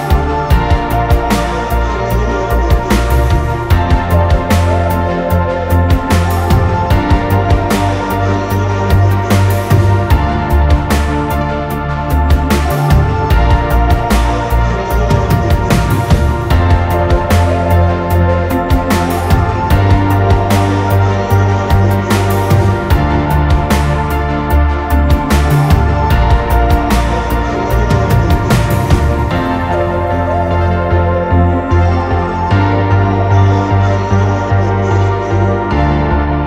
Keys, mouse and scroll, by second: 3.3 ctrl+z, 7.4 ctrl+t, 8.3 alt+shift+click, 12.0 alt+shift+click, 14.4 Return, 14.5 Return, 21.4 double click, 23.0-25.1 typing, 34.0 typing.